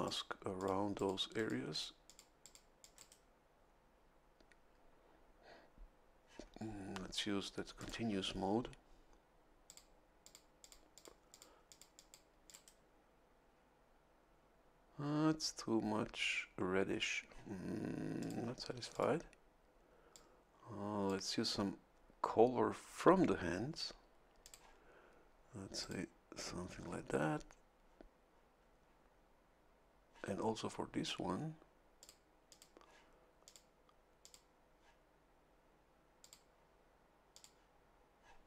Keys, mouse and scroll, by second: 0.0 click, 0.5 click, 0.9 click, 1.3 click, 1.7 click, 2.0 click, 2.4 click, 2.8 click, 2.9 right click, 7.8 ctrl+click, 9.6 click, 10.2 click, 10.6 click, 11.3 click, 11.7 click, 12.4 click, 18.2 click, 18.9 click, 20.1-21.2 drag, 24.4 click, 25.8 click, 32.0 click, 32.5 click, 33.4 click, 34.2 click, 36.2 click, 37.3 click.